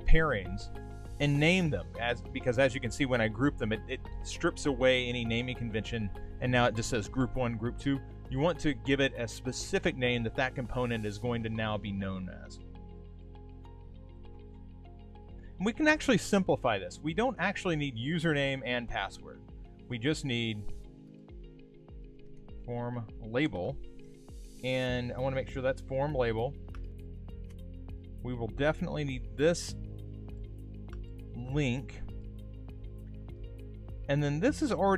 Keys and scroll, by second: 0.1 super+g.